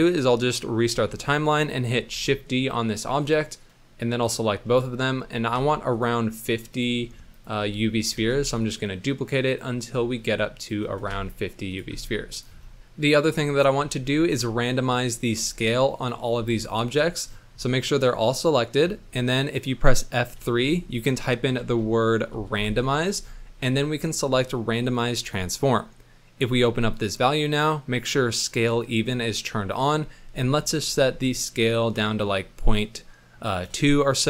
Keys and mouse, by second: 0.1 click, 0.9 shift+middle click, 2.1 shift+d, 4.7 shift+click, 5.6 shift+d, 7.3 shift+click, 8.3 shift+d, 9.5 click, 11.4 shift+d, 12.3 click, 20.3 F3, 29.7-33.8 drag.